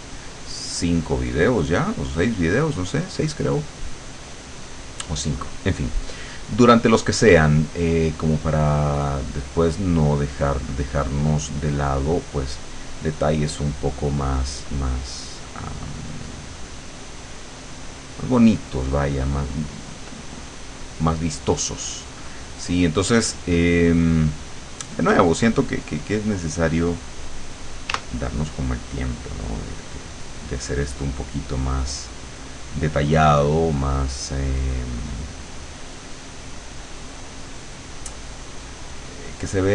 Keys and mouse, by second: 1.1 click, 3.1-4.1 drag, 6.6-7.7 drag, 8.7-9.9 drag, 10.1-12.1 drag, 12.6-15.3 drag, 17.7-21.2 drag, 28.0 w, 28.9-33.1 drag, 35.1-36.2 drag, 36.5 click.